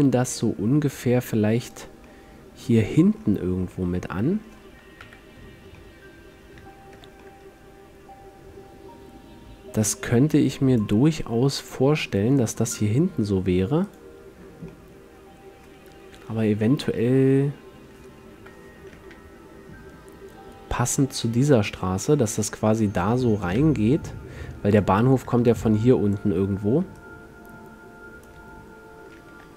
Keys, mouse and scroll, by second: 0.5-2.1 drag, 2.1-4.1 middle drag, 5.1 KP_5, 7.1 z, 11.3 middle click, 11.7 a, 14.0 click, 14.8 middle click, 14.9 right click, 15.1 middle click, 15.2 click, 15.2 middle click, 15.3 click, 15.7 middle click, 16.3 KP_7, 18.6 KP_5, 19.3 r, 24.9-26.3 drag, 25.5-27.0 d, 26.6-27.1 drag, 27.5-28.9 drag, 28.5 d.